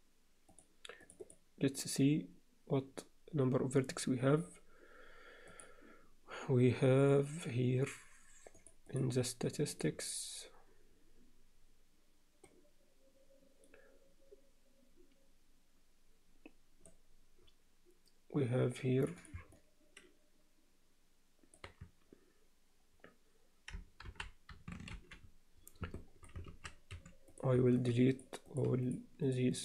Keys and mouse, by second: 1.1 click, 5.7-8.7 drag, 8.9-10.9 drag, 19.0 click, 19.2 click, 19.5-21.5 middle drag, 24.1 ctrl+l, 24.9 shift+h, 25.9 alt+middle click, 26.5 alt+a, 26.9 3, 27.3 click, 27.7 shift+click, 28.1 shift+click, 28.5 shift+click, 28.8 shift+click, 29.3 shift+click.